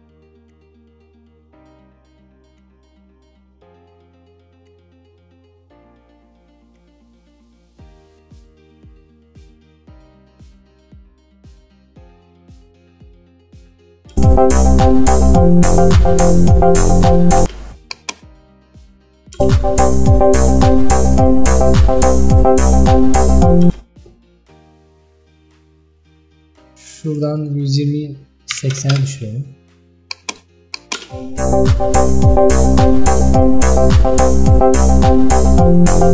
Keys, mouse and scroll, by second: 13.4 click, 14.2 space, 17.5 space, 18.0-19.5 drag, 19.5 space, 23.7 space, 29.0-31.1 drag, 31.1 space.